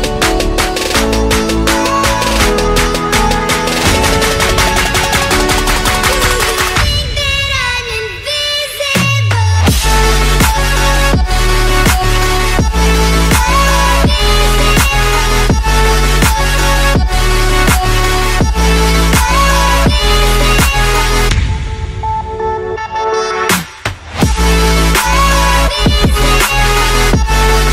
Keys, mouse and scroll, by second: 0.2 click, 0.9 click, 4.5 click, 5.2 click, 5.9 click, 6.3 middle click, 6.6 middle click, 7.7 click, 7.9 middle click, 7.9 middle click, 8.4 middle click, 8.7 scroll down 5, 9.3 middle click, 10.9 click, 12.7 click, 14.9 click, 15.4 click, 17.0 click, 17.5 click, 18.2 click, 18.5 F9, 21.9 click, 22.8 click, 23.7 click, 24.5 middle click, 24.7 middle click, 25.1 scroll, 25.7 click, 26.8 click, 27.3 click.